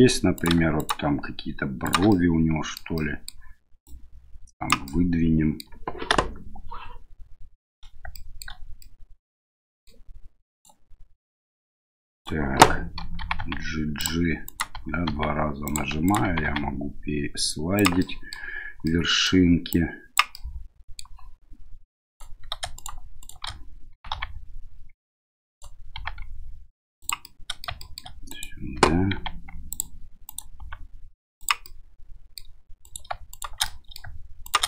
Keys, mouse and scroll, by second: 0.3 right click, 0.8 shift+right click, 1.8 shift+right click, 2.1 middle click, 2.9 middle click, 3.8 click, 4.9 middle click, 6.1 KP_1, 8.1 middle click, 8.9-9.9 middle drag, 10.5 right click, 12.1 right click, 13.2 g, 14.4 right click, 14.7 g, 16.0 right click, 16.2 g, 18.1 middle click, 18.9 middle click, 19.8 click, 20.3 middle click, 22.1 right click, 22.7 shift+right click, 23.2 shift+right click, 23.9 g, 25.9 g, 27.2 middle click, 27.8 shift+middle click, 28.3 right click, 29.1 g, 30.2 right click, 30.6 g, 31.6 middle click, 32.8 right click, 33.3 shift+right click, 33.6 middle click, 34.4 shift+right click.